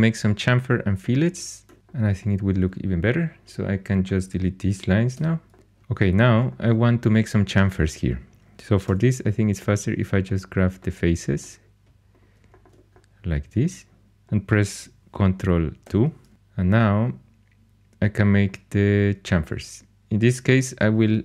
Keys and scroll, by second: 5.1 x, 8.8 3, 15.8 ctrl+2, 20.5 2.